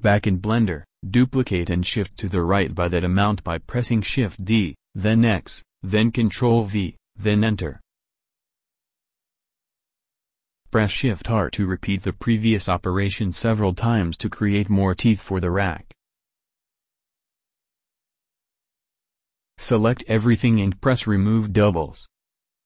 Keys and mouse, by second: 4.8 shift+d, 10.7 shift+r, 11.0 shift+r, 11.2-16.1 shift+r, 17.3 shift+r, 19.2 a, 19.4 a, 19.8 click, 22.2 click.